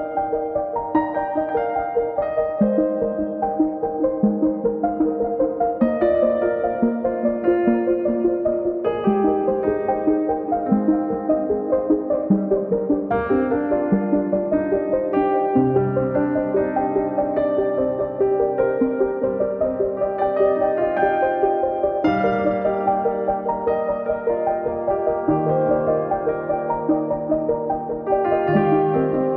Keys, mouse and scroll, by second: 0.2 scroll down 3, 0.3 middle click, 0.6 click, 0.7 scroll up 2, 0.9-1.5 middle drag, 2.0 click, 3.2 click, 4.3 p, 5.4 click, 5.6 scroll down 2, 5.8 KP_1, 6.0 scroll up 6, 6.6 click, 7.1 scroll down 10, 7.5 scroll up 9, 8.4 click, 8.6 scroll down 11, 9.0 click, 9.3 scroll up 3, 9.4 middle click, 9.7 KP_1, 9.9 scroll up 2, 10.1 click, 10.8 click, 11.1 scroll up 1, 11.6 click, 11.8 scroll up 1, 11.9 scroll down 10, 12.2-12.8 scroll up 4, 13.1 click, 13.4-13.8 scroll up 3, 16.9-19.5 drag, 19.5 scroll up 4, 19.7 scroll down 4, 20.1 ctrl+z, 21.3-21.8 scroll up 7, 21.9 ctrl+z, 22.0 scroll down 1, 22.9 click, 23.2 scroll down 3, 23.3-23.8 scroll up 6, 24.3 ctrl+z, 25.1 click, 25.5 scroll down 2, 25.6-26.1 scroll up 6, 26.1 scroll down 3.